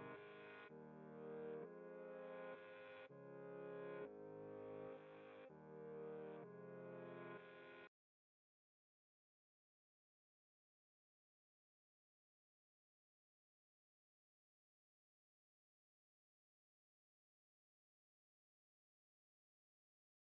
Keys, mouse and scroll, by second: 4.6 click, 12.8 click, 13.9-16.6 alt+right drag, 16.6 click.